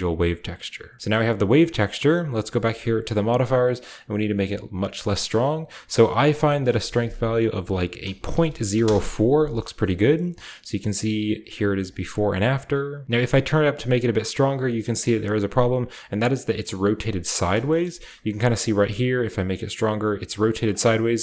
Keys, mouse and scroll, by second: 1.0 middle drag, 1.2-2.9 scroll down 1, 3.0 click, 3.6-5.0 scroll down 1, 5.0-6.3 scroll down 1, 6.3-7.9 drag, 8.1-8.6 typing, 8.7 Return, 9.9-11.3 shift+middle drag, 9.9-11.0 shift+scroll up 1, 11.0-11.8 shift+scroll up 1, 11.4 click, 11.8 click, 12.2 click, 12.5 click, 13.0-18.7 drag, 17.3-18.7 right drag, 18.0-20.3 scroll up 1, 19.1-20.7 middle drag.